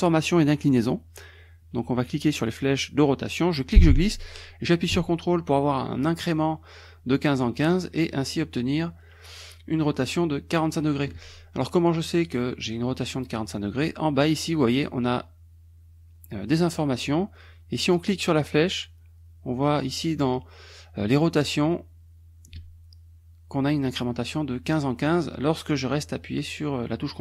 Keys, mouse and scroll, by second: 3.6-11.0 drag, 18.2-27.2 drag.